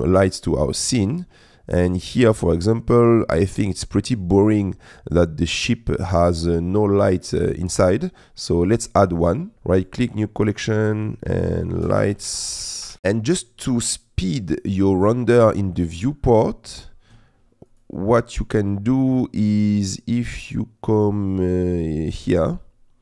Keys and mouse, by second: 8.3 middle click, 9.5 ctrl+z, 9.5 click, 10.9-12.9 drag, 17.7 click, 18.9 click, 19.9 click.